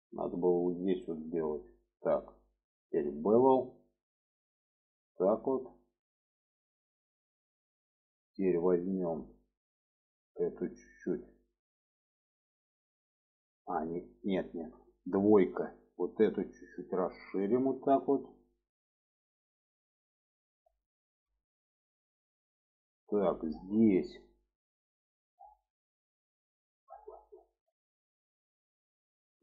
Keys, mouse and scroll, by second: 0.5 click, 1.4 click, 2.0 middle click, 3.2 click, 4.1-8.2 drag, 8.9 click, 9.3 middle click, 11.0 click, 12.5 click, 13.7 click, 14.4 shift+middle click, 15.5 2, 16.1 click, 16.9-18.4 drag, 18.6 middle click, 19.6-20.7 middle drag, 20.9 shift+middle click, 21.3-22.4 middle drag, 22.6 shift+middle click, 23.4 middle click, 24.1 shift+middle click, 25.4-26.7 middle drag, 27.0 shift+middle click, 28.3-28.7 middle drag, 29.1 middle click.